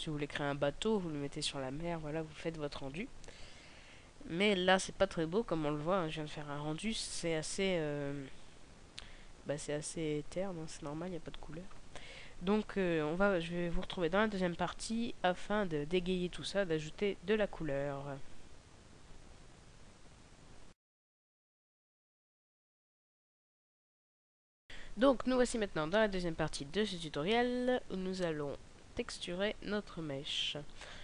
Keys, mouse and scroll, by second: 18.9 Escape, 24.6 click.